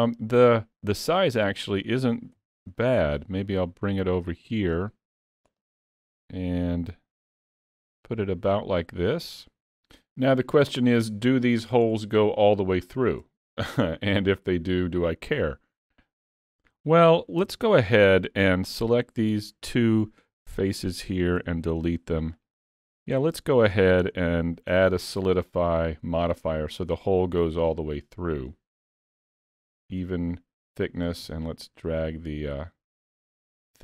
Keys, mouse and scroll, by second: 1.0 click, 2.4 ctrl+z, 2.8 middle click, 3.6 click, 4.9 middle click, 5.6 s, 6.3 middle click, 7.4 s, 8.6 middle click, 11.0-11.5 scroll up 1, 11.9-12.6 scroll up 2, 12.8 shift+middle click, 14.4-14.9 scroll down 1, 15.4 middle click, 17.5 Tab, 18.5 3, 18.8 click, 19.2 middle click, 20.5 shift+click, 21.4 x, 22.9 middle click, 24.0 Tab, 24.3 middle click, 25.7 click, 29.9 click, 31.3 shift+click.